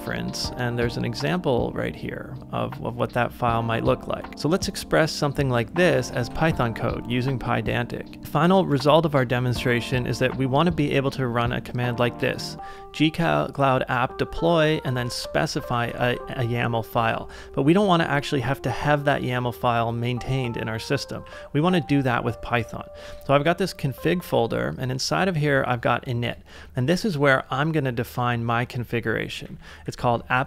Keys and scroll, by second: 6.2 super+Tab, 8.2 k, 10.1 j, 10.8 shift+v, 15.0 ctrl+c, 15.1-16.3 typing, 17.0 ctrl+w, 21.2 h, 21.9 k, 23.1 Return, 24.2 j, 26.2 Return, 29.0-30.4 typing.